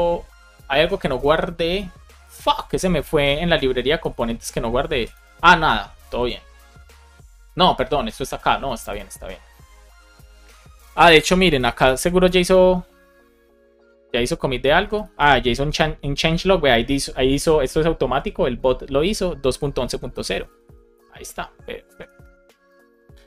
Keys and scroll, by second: 3.0 super+Right, 4.0 Return, 5.2 Return, 12.1 Return, 14.6 space, 15.1 Return, 22.4 BackSpace, 22.8 Return.